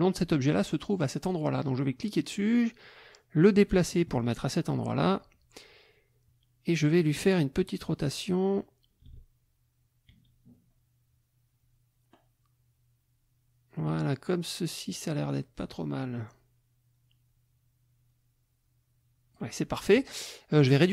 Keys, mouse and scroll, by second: 1.0 click, 2.2-4.7 drag, 4.0 right click, 7.0 click, 7.9-19.5 drag, 20.8 click.